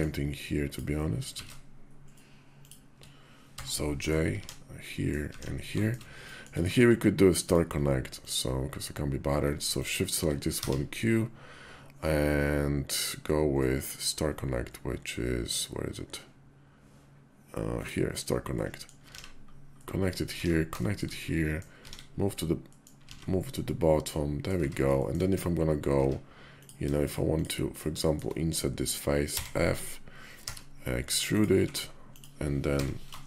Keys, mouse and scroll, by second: 0.4 shift+click, 1.1 ctrl+z, 2.3 shift+click, 3.3 j, 3.6 click, 4.2 alt+x, 4.6 click, 5.2 alt+x, 6.1 click, 9.5 shift+click, 10.4 q, 18.4 middle click, 18.9 alt+x, 19.6 click, 20.3 alt+x, 20.6 shift+click, 21.0 click, 21.6 alt+x, 22.4 click, 23.0 alt+x, 23.4 click, 24.4 Tab, 24.8 shift+drag, 25.8 Tab, 26.3 click, 27.1 shift+click, 27.8 shift+click, 28.4 click, 29.0 f, 30.2 e, 31.3 s, 32.5 i.